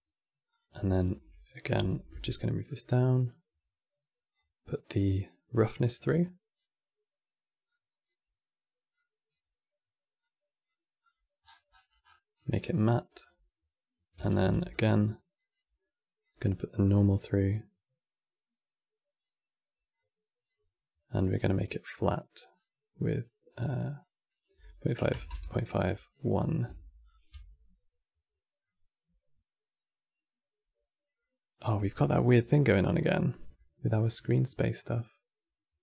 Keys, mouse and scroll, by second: 0.2 click, 1.6 ctrl+shift+d, 4.1 click, 5.8 click, 7.4 click, 8.6 click, 9.9 click, 10.7 click, 12.1 click, 12.3 scroll down 2, 12.9 click, 14.0 ctrl+shift+d, 15.1-16.0 drag, 19.6 click, 20.8 click, 25.8 click, 26.7 ctrl+shift+click, 28.3-35.8 middle drag.